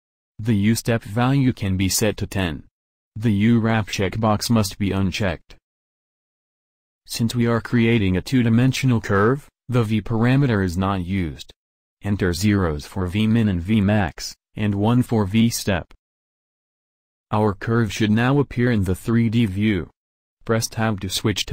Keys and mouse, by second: 5.2-7.1 drag, 11.7-13.4 drag, 20.1 Tab.